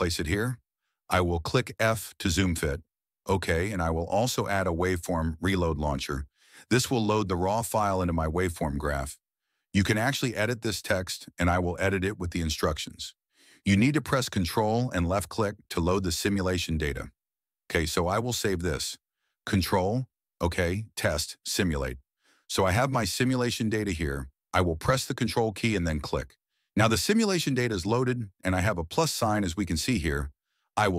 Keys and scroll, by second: 13.1-19.1 typing, 21.5 ctrl+s.